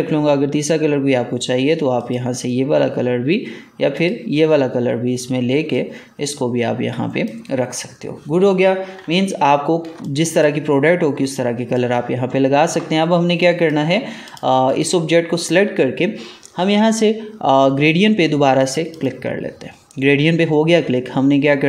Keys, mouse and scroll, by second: 2.0-9.2 drag, 9.1 scroll down 2, 9.8 space, 9.9 click, 10.4 space, 10.7 alt+scroll down 1, 11.2 space, 11.2 click, 11.7 space, 13.3 click, 18.8 click.